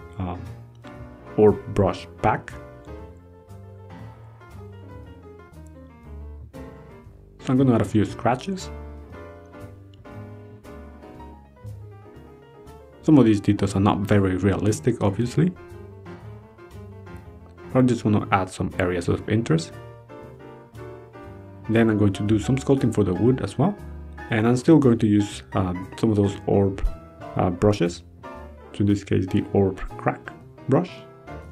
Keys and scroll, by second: 0.2 ctrl+z, 2.4 ctrl+z, 2.7 ctrl+z, 4.1 ctrl+z, 5.4 ctrl+z, 6.7 ctrl+z, 7.7 ctrl+z, 8.2 ctrl+z, 11.6 ctrl+z, 18.8 ctrl+z, 20.0 ctrl+z, 22.7 ctrl+z, 25.1 ctrl+z, 25.8 ctrl+z, 29.2 ctrl+z.